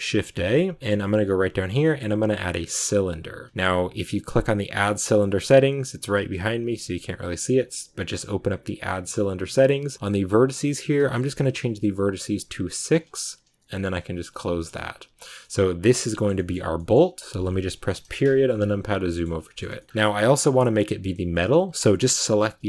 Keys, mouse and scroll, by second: 12.9 click, 15.9-18.3 shift+middle drag, 17.9 KP_Decimal, 18.3 scroll up 1, 18.4 scroll down 2, 19.0-20.4 middle drag, 20.4-21.8 scroll up 6.